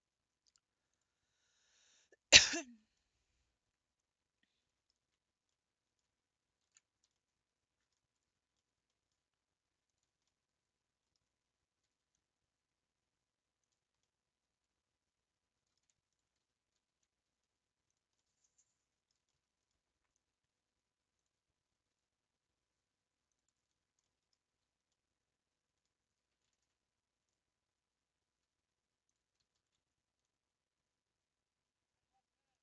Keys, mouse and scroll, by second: 0.9 click, 2.9 Tab, 3.0-5.0 middle drag, 5.0 Tab, 5.3 scroll up 3, 5.6-6.8 middle drag, 6.8 ctrl+s, 7.1-8.2 middle drag, 8.2 scroll up 2, 8.6-9.9 shift+middle drag, 9.9 alt+click, 10.5-11.8 middle drag, 11.8 g, 14.0-16.1 middle drag, 16.1 alt+click, 16.7 g, 16.8 g, 18.2-21.2 middle drag, 21.2 click, 21.9 r, 23.6-24.0 scroll down 3, 24.1 shift+middle click, 24.8 scroll up 1, 25.0-26.5 middle drag, 26.5 ctrl+z, 27.3 click, 29.1 shift+click, 29.5 g.